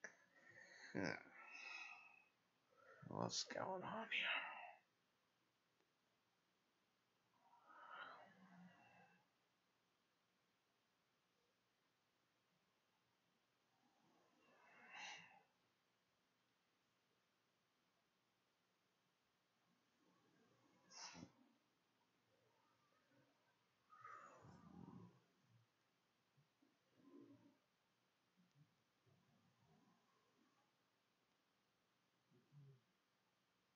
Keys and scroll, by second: 29.5-32.9 typing.